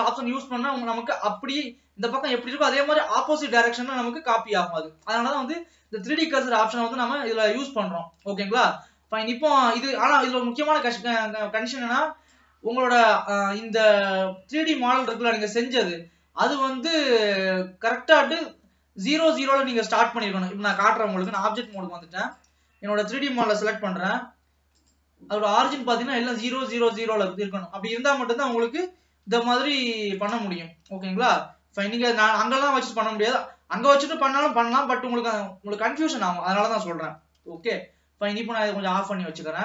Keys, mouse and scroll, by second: 0.2 middle click, 0.8-1.2 scroll up 2, 1.2-5.0 middle drag, 5.0 scroll down 2, 5.3 middle click, 5.9-7.3 scroll up 1, 7.3-7.6 scroll down 1, 7.6 middle click, 8.4 scroll up 1, 8.6 middle click, 9.2-9.5 scroll down 1, 9.7-11.9 middle drag, 11.9 click, 15.2 click, 17.5 click, 18.1-20.9 middle drag, 20.9-22.2 drag, 22.4 click, 23.7 n, 25.0 click, 29.5 n, 30.4 ctrl+s, 32.1 n, 37.6 n, 39.0 click, 39.5-39.6 middle drag.